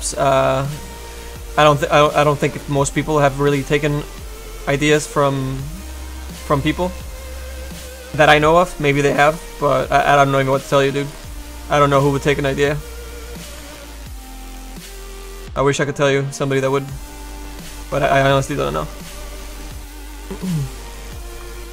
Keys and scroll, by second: 0.4 s, 2.2 s.